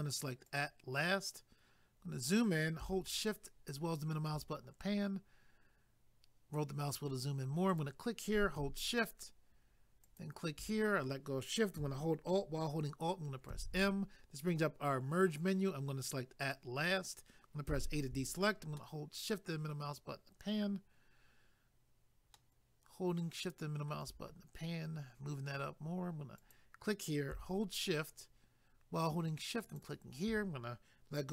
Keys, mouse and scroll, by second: 0.5 click, 1.9 scroll up 1, 3.1 shift+middle click, 5.2-6.1 scroll up 1, 7.7 click, 10.1 shift+click, 13.5 alt+m, 16.4 click, 17.7 a, 18.8 shift+middle click, 22.3 shift+middle click, 26.4 click, 29.6 shift+click.